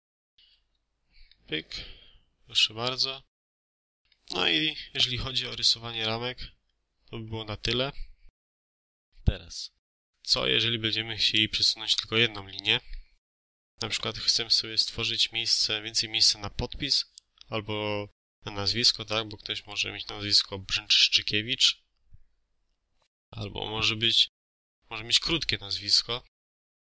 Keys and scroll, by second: 0.4 Escape.